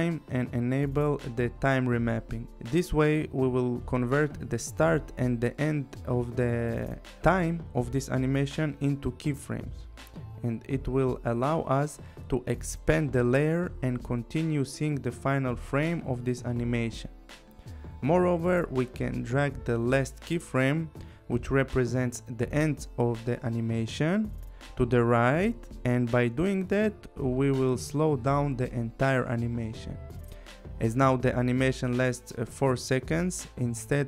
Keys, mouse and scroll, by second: 0.9 click, 8.0 click, 12.7 click, 15.8 click, 18.7 click, 22.2 click, 24.7 click, 27.3 click.